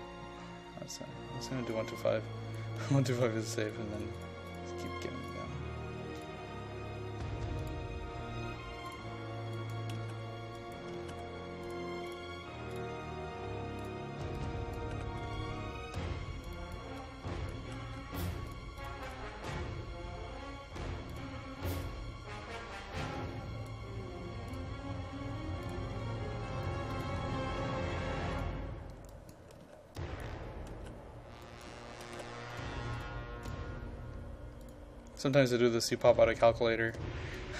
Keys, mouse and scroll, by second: 1.6 click, 2.7 KP_1, 2.9 KP_2, 3.2 KP_5, 3.7-9.8 drag, 9.8-11.2 typing, 10.6 click, 11.7-14.9 drag, 14.9 KP_1, 15.0 KP_2, 15.3 KP_5, 16.0 click, 17.7 KP_1, 17.8 KP_2, 18.1 KP_5, 18.5-22.9 drag, 24.1 KP_0, 24.6 click, 29.4-32.3 typing, 30.0 click, 31.5 click, 32.6 click, 36.1-37.5 typing, 37.0 click.